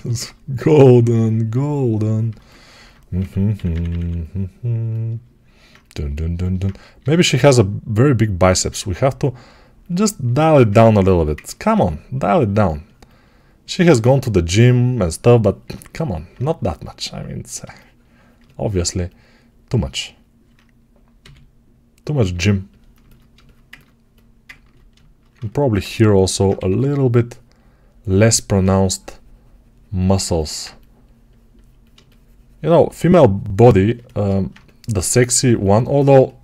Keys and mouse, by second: 3.0 6, 3.4 [, 3.6 ], 3.7 ], 6.9 g, 11.6 2, 21.1 g, 25.1-30.5 alt+shift+right drag, 26.4 2, 30.5-36.4 drag.